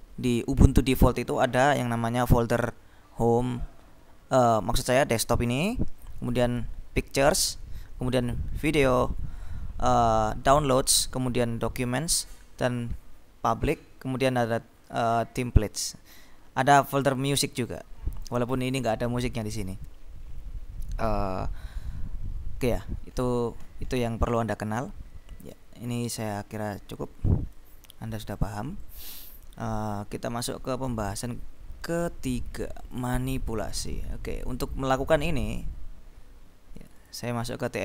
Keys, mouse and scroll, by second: 3.4-4.2 scroll down 1, 4.2-4.7 scroll up 2, 9.2-10.2 scroll up 2, 11.1-11.7 scroll down 2, 13.9-14.5 scroll down 2, 15.0-16.0 scroll down 2, 18.4 click, 20.1-21.3 scroll down 4, 22.9-24.1 scroll up 2, 24.1-24.8 scroll up 1, 24.8 scroll up 1, 26.2-28.1 drag, 28.5 click, 32.9-34.1 drag, 34.4 click, 36.8 click.